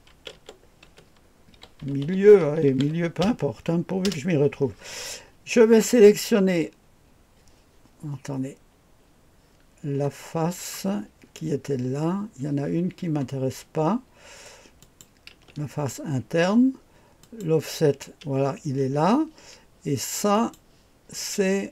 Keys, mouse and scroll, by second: 0.1-3.3 typing, 4.0 Return, 14.8 click, 15.3 space, 17.2 click, 18.2-18.6 typing, 20.3 click.